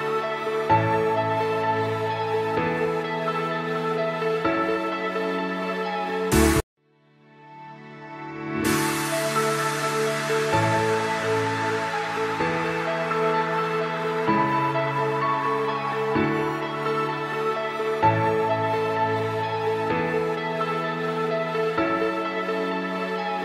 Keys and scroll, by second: 0.2 Escape, 3.1 c, 3.5 shift+F2, 3.9 Escape, 6.1 c, 6.4 Escape, 6.8 F3, 9.6 c, 9.9 F2, 10.7 Escape, 12.1 F3, 15.4 c, 15.8 Escape, 17.7 F2, 19.3 shift+F2, 19.4 F3, 22.3 shift+F2, 22.9 Escape.